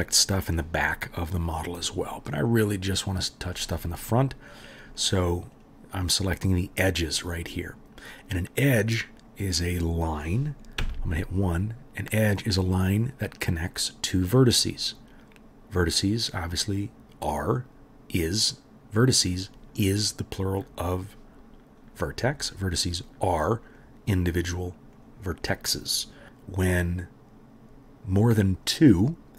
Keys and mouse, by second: 0.1 middle click, 0.2 right drag, 0.5 middle click, 0.6 right click, 0.9 middle click, 1.0-1.4 right drag, 1.4 middle click, 1.5 right drag, 1.9-3.2 drag, 3.3-4.6 middle drag, 4.6-6.0 right drag, 6.0-6.7 middle drag, 6.7-7.5 right drag, 7.5 middle click, 7.6 right click, 8.7 middle click, 8.8-9.2 right drag, 9.2 middle click, 9.3-9.6 right drag, 9.6-10.0 middle drag, 10.0-11.5 right drag, 10.8 1, 11.5 middle click, 11.6 right click, 14.9-15.3 middle drag, 15.8-20.7 middle drag, 22.3-26.0 middle drag, 26.0-29.3 drag.